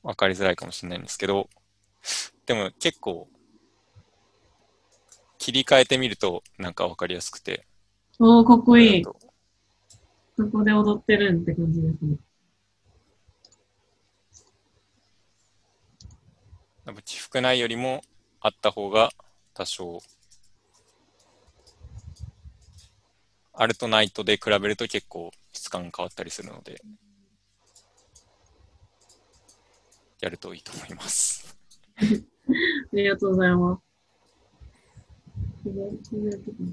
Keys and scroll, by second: 5.9 BackSpace, 6.1 Return, 19.9 ctrl+z, 20.1 ctrl+z, 20.4 ctrl+z, 20.8 ctrl+z, 26.0 ctrl+z.